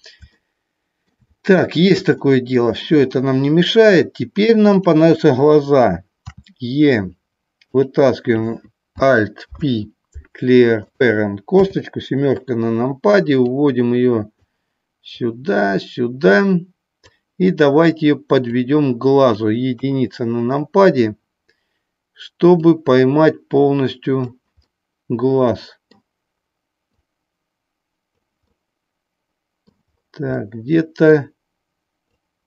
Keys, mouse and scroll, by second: 7.8 click, 8.1 click, 9.5 alt+p, 11.5 KP_7, 13.4 click, 15.1-17.0 drag, 18.5 click, 19.7 KP_1, 22.6-24.2 drag, 26.9-28.2 drag, 32.1-32.4 drag.